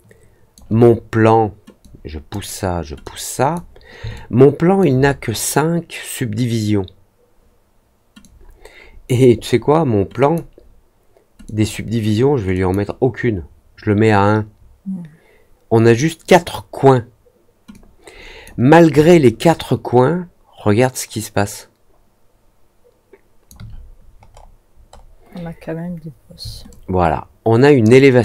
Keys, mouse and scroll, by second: 1.7-2.2 drag, 3.0-3.5 drag, 4.1-4.7 alt+drag, 8.1-9.0 drag, 10.1 click, 11.4 click, 12.5 click, 17.6 click, 19.0-23.4 alt+drag, 24.2 scroll up 1, 24.8 middle click, 25.3 middle click, 26.6 alt+click.